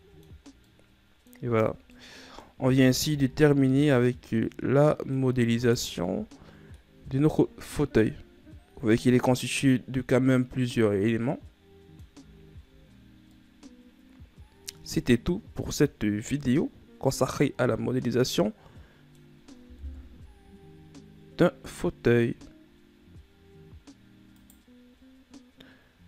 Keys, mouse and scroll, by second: 0.4 middle click, 1.1 scroll down 2, 1.3-2.1 middle drag, 2.1-2.5 ctrl+scroll down 3, 2.5-3.2 middle drag, 3.2 a, 3.7 a, 4.4-6.2 middle drag, 6.2 right click, 6.7-7.6 middle drag, 7.6 a, 7.9-11.0 middle drag, 13.0-13.9 shift+scroll up 1, 13.9-16.9 middle drag, 20.4 KP_1, 23.3-24.6 scroll up 1, 25.0 right click.